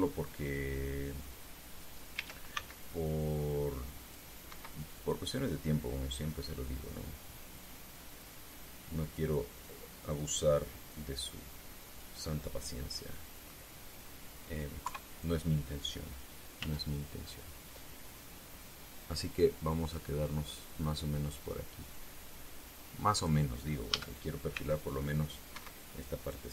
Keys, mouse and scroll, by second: 2.9 a, 3.2 c, 3.8-5.0 drag, 5.2 Escape, 6.4-13.0 drag, 13.0-14.3 middle drag, 14.3 scroll up 1, 15.6 KP_3, 17.3 z, 19.4-20.8 drag, 22.0 click, 23.3 click, 24.6 a, 25.6 click, 25.6 c, 26.2 Escape.